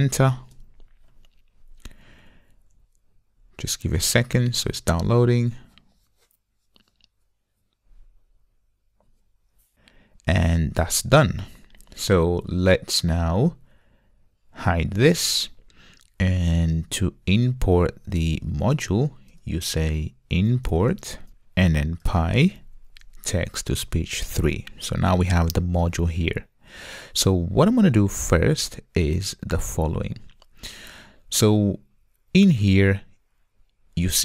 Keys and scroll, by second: 23.9 Return.